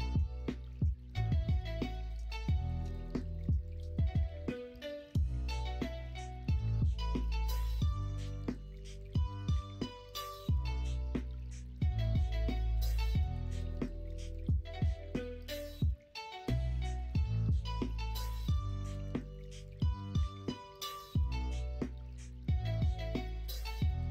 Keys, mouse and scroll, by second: 0.6 p, 4.0 Tab, 4.7 Tab, 5.1 Tab, 5.9 Tab, 8.2 2, 12.9-14.7 middle drag, 14.3 Tab, 16.3 Tab, 17.5 l, 18.4 f, 19.8 i.